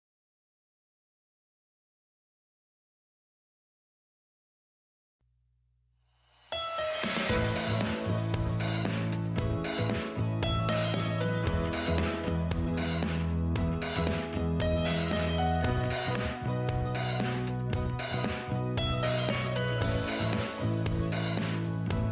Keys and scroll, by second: 19.3 ctrl+a, 20.0 ctrl+x, 21.6 ctrl+v.